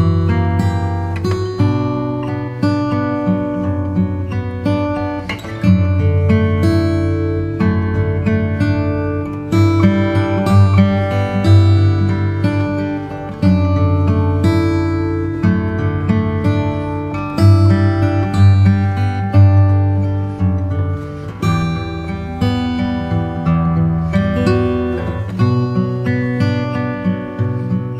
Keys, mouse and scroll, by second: 1.6-3.8 alt+shift+right drag, 3.8 s, 8.0-10.8 alt+drag, 10.0 s, 10.8 Escape, 11.4 s, 13.8 Tab, 13.9 Tab, 13.9 click, 14.8-16.0 middle drag, 16.3-26.7 middle drag, 27.6-27.9 middle drag.